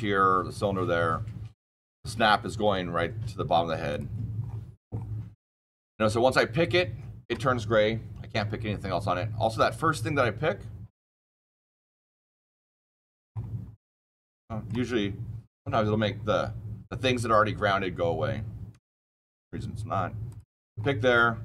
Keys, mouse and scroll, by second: 3.8 click, 4.3-5.8 scroll up 18, 5.8 shift+middle click, 5.9 middle click, 6.2-7.2 shift+middle click, 6.2 scroll, 9.7 Escape, 11.0 click, 12.4 click, 13.0 scroll down 2, 13.2-13.7 scroll up 6, 13.8-14.6 shift+middle click, 14.1 shift+scroll up 1, 14.4 scroll down 9, 15.6 scroll, 15.8-17.2 scroll down 6, 17.7 scroll up 7, 18.3 scroll down 2, 18.6 scroll, 18.8 shift+middle click, 19.4 middle click, 20.2 click, 20.7-21.4 scroll down 12, 21.0 middle click.